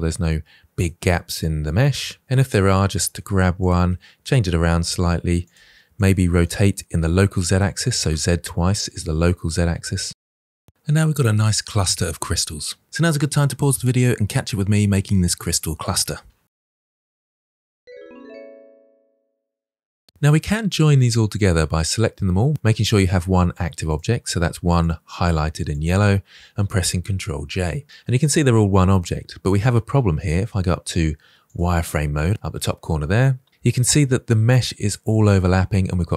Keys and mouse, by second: 2.1 shift+d, 2.6 drag, 2.8-3.9 middle drag, 4.3-6.9 typing, 4.7-5.0 middle drag, 8.1-8.8 drag, 8.9-9.9 typing, 10.4-11.5 drag, 11.5-12.2 middle drag, 12.5-13.0 middle drag, 20.0 middle click, 21.4 drag, 23.8 shift+click, 25.6 shift+click, 27.3 ctrl+j, 27.8-28.9 drag, 31.4 click, 33.9-36.1 drag.